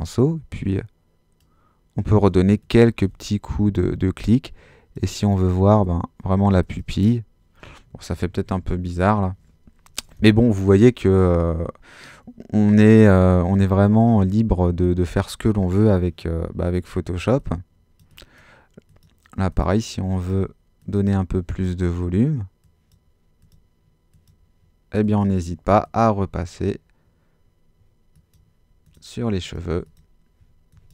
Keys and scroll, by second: 8.1 alt+super+z.